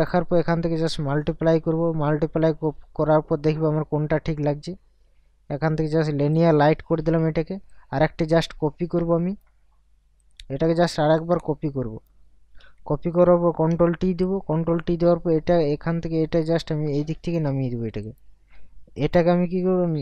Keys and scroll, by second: 13.4 ctrl+t.